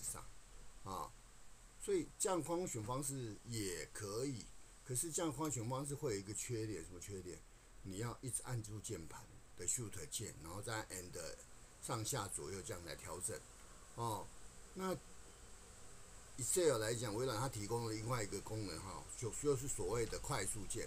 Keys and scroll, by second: 20.0 ctrl+Home.